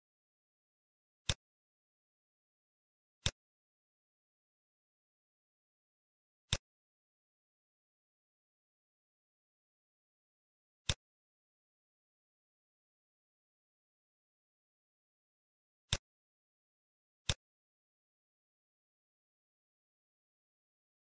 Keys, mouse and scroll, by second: 1.2 click, 2.5 scroll down 4, 3.1 click, 5.4 shift+d, 7.3 middle click, 8.1-9.1 scroll up 6, 9.1 scroll down 1, 9.2 middle click, 9.5 scroll up 2, 10.8 click, 13.7-14.0 scroll down 6, 14.2 middle click, 14.9 scroll down 2, 15.8 click, 17.2 click, 20.0 middle click, 20.0 scroll down 4, 20.5-21.0 scroll up 13.